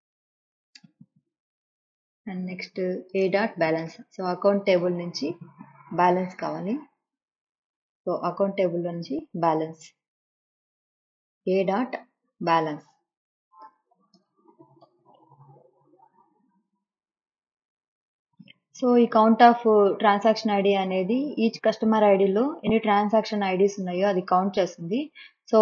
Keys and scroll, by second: 0.8 BackSpace, 3.9 ,, 13.3-16.1 typing.